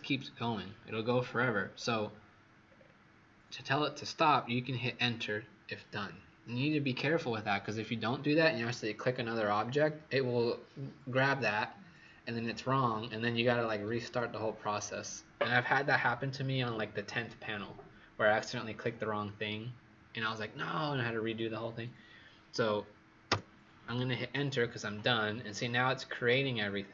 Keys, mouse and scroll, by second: 1.6-2.6 scroll down 4, 2.6-4.6 scroll up 2, 23.2 Return.